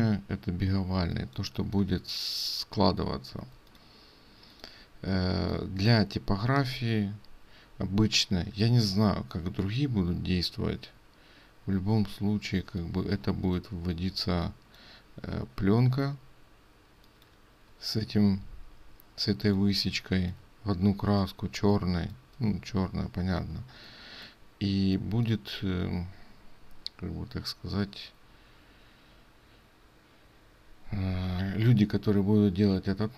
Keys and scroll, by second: 8.7 ctrl+space.